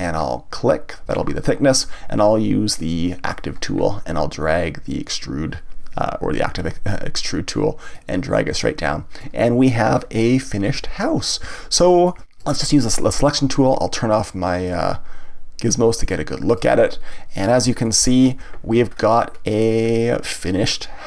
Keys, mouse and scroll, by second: 1.1 click, 3.2 click, 7.9-9.8 drag, 9.8-11.0 scroll down 1, 11.0-12.3 middle drag, 12.3 click, 14.6-17.1 drag, 17.1-18.9 middle drag, 18.9-19.3 scroll down 1, 19.3-20.4 scroll up 1, 20.4-21.0 middle drag.